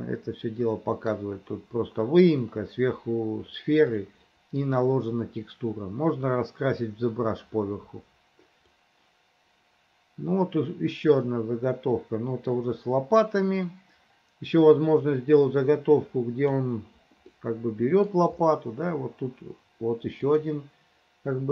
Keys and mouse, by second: 4.0 middle click, 8.8-16.7 drag, 17.3 middle click, 20.3 click.